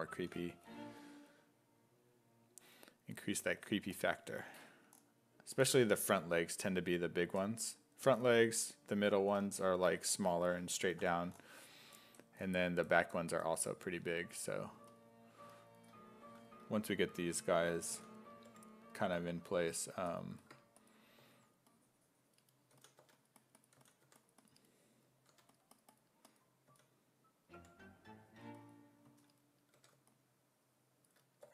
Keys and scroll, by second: 0.2 s, 17.9 s, 18.5 5, 21.2 2, 22.8-25.3 typing, 26.7 s, 27.6 5, 29.1 s, 29.8 1.